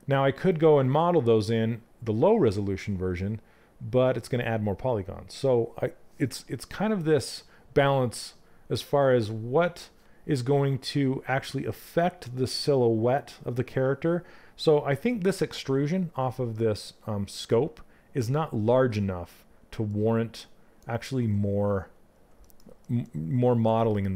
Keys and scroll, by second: 20.5 ctrl+z.